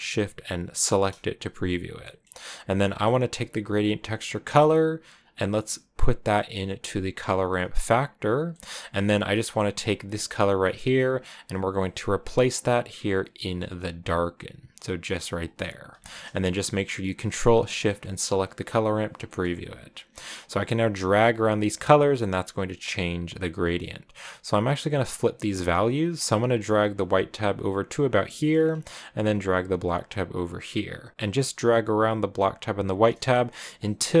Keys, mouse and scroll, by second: 0.7 ctrl+shift+click, 2.2 middle click, 3.1 click, 4.8 click, 7.8 click, 8.6 middle click, 8.7 click, 15.3 click, 16.0 middle click, 17.1 ctrl+shift+click, 18.0 scroll up 2, 19.2 middle click, 19.6-20.6 scroll up 3, 20.6-28.3 drag, 28.3 middle click, 28.8 scroll up 4, 29.0-33.2 drag, 33.2 shift+middle click, 33.4-34.2 scroll up 9, 33.6 middle click.